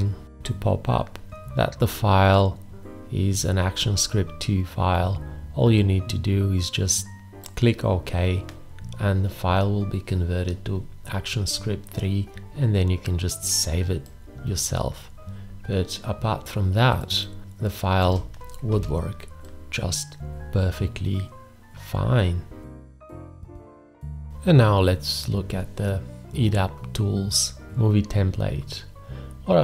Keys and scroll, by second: 17.4 space, 18.7 g.